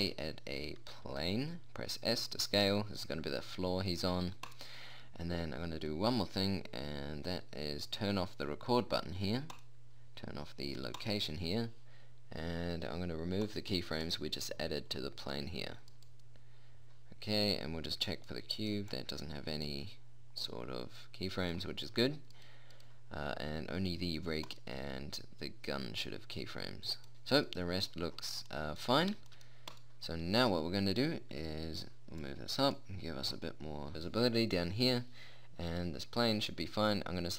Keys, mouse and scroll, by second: 1.5 s, 10.0-14.6 drag, 15.5 click, 17.7-19.4 right drag, 19.4-21.4 drag, 22.8-26.9 right drag, 26.9 middle click, 27.1-29.4 right drag, 32.1 click, 32.1 middle click, 32.1 right click, 32.8-33.9 drag, 36.8-37.3 right drag.